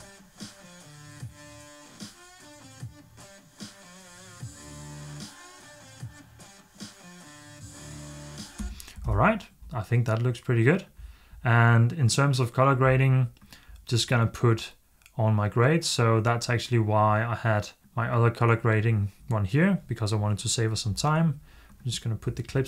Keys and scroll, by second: 9.0 super+s.